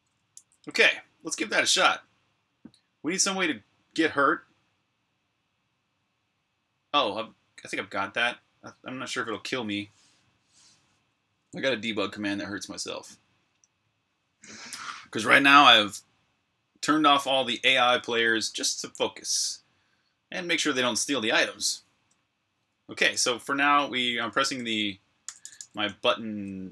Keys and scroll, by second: 0.0-1.5 typing, 11.7-13.3 typing, 21.6-26.7 typing.